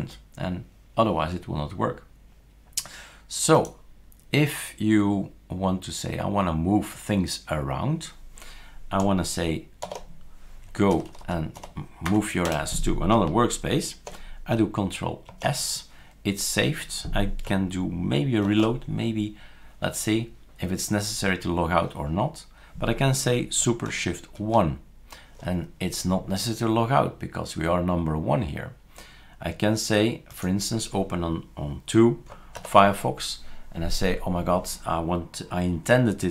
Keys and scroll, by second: 9.9 #, 10.9 Down, 11.1 Down, 11.2 Down, 11.6 Down, 12.1 Up, 12.5 BackSpace, 15.3 ctrl+s, 18.5 shift+super+r, 24.4 shift+super+1, 32.6 ctrl+alt+f.